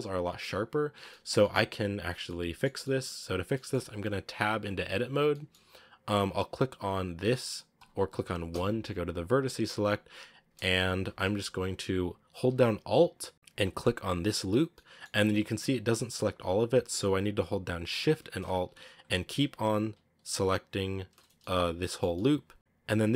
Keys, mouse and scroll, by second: 0.0-4.4 shift+middle drag, 1.0 scroll up 1, 4.4 Tab, 5.2-7.7 middle drag, 7.7 click, 13.3-14.8 alt+right drag, 14.8-18.8 middle drag, 18.8 alt+shift+right click, 19.8 alt+shift+right click, 20.8 alt+shift+right click, 21.2 scroll up 1, 21.3-23.1 middle drag.